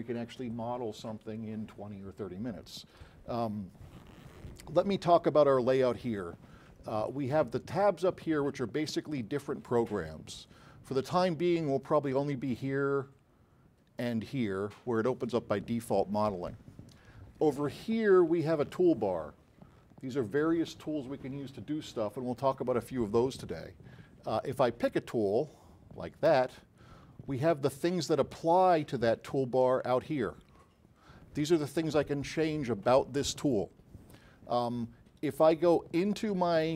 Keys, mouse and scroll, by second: 12.5 click, 14.0 click.